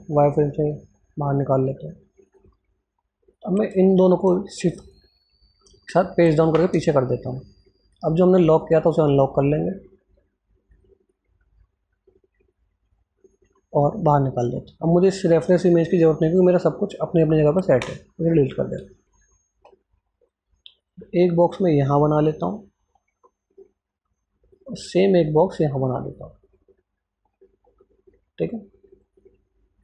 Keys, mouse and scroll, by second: 2.5 click, 3.8 shift+click, 6.2 shift+Page_Down, 7.5 click, 13.1-16.7 drag, 17.6 Delete, 18.7 scroll up 1, 20.6-29.0 drag.